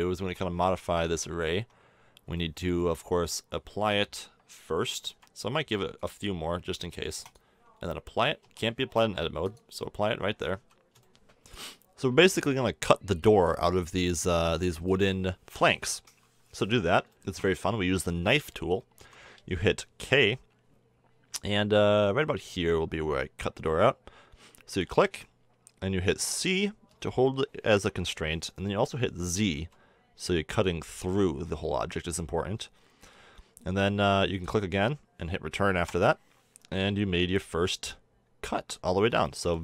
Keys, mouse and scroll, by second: 0.2 Tab, 1.5 Tab, 3.1 KP_1, 8.4 Tab, 10.1-10.6 drag, 10.6 z, 10.8 click, 11.0 click, 11.1 click, 11.4 click, 14.4 middle click, 14.9-16.0 middle drag, 16.0 KP_1, 18.9 k, 36.5-39.4 middle drag.